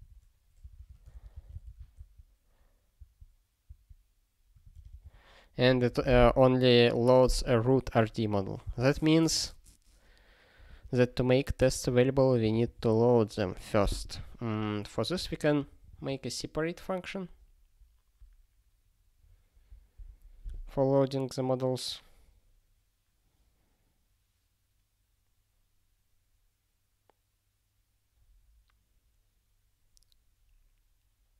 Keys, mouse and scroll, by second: 11.7 super+o, 12.5 super+b.